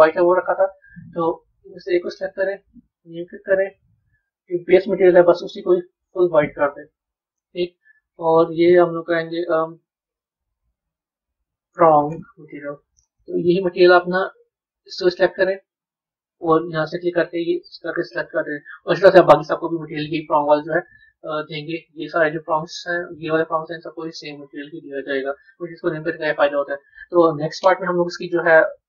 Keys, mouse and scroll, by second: 1.1 click, 1.8 click, 2.7-4.8 drag, 7.0-8.7 middle drag, 8.7 click, 8.9-12.0 drag, 13.5-14.8 middle drag, 14.8 click, 16.2-18.5 drag, 18.5-21.9 middle drag, 21.9 click, 22.5 click, 23.0 click, 24.3-26.9 drag, 26.9 a.